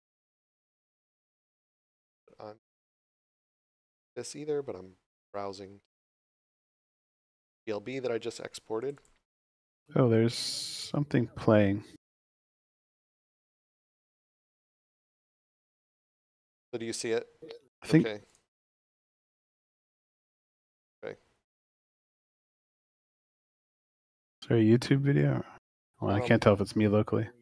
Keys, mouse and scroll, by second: 2.6 scroll down 1, 5.8 click, 8.8 click, 18.3 click.